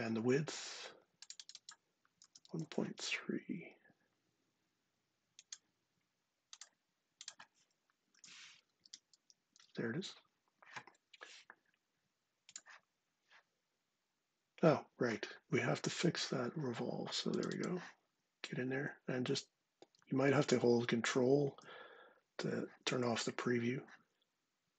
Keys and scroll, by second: 2.0 super+c, 2.2 super+Tab, 7.9 super+v, 8.6 Return.